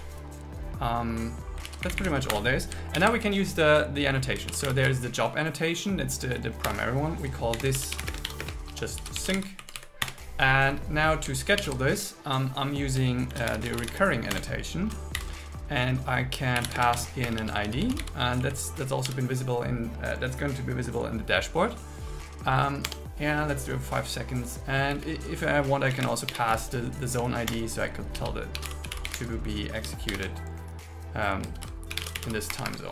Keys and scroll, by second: 1.7 super+s, 1.9 Up, 2.3 Return, 3.0 alt+l, 4.5 shift+Return, 4.8 shift+j, 6.7 Return, 7.6-9.6 typing, 9.7 Right, 10.2 Return, 11.7 alt+l, 13.3 shift+r, 14.4 Return, 15.2 shift+8, 16.8 space, 17.0 shift+0, 17.4 shift+2, 18.5 Right, 22.9 Tab, 24.9 Left, 26.1 space, 27.5 Return, 28.2 shift+2, 28.6 shift+e, 30.1 shift+7, 31.6 shift+8, 32.6 Escape.